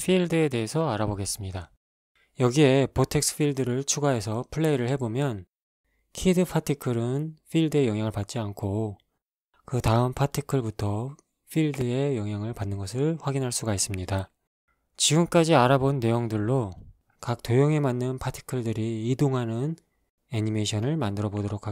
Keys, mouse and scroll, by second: 1.7 shift+a, 6.2-8.2 drag, 8.4 alt+a, 14.0 Escape, 20.6 ctrl+space, 21.5 right click.